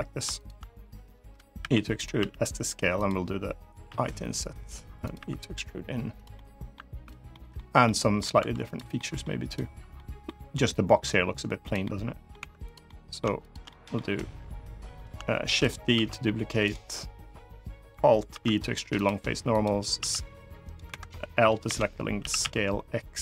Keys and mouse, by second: 0.1 shift+click, 1.3 e, 1.7 click, 1.9 s, 2.7 click, 3.6 i, 4.7 click, 5.9 click, 5.9 e, 6.0 middle click, 6.7 3, 7.0 middle click, 7.6 middle click, 8.1 2, 8.7 middle click, 9.2 click, 9.7 middle click, 10.5 click, 11.5 middle click, 12.1 3, 12.6 middle click, 13.2 shift+click, 13.4 middle click, 15.1 shift+d, 15.7 s, 16.3 right click, 18.0 alt+e, 19.2 click, 19.7 s, 20.4 click, 20.6 Escape, 21.4 l, 21.9 s, 22.1 x, 23.0 click.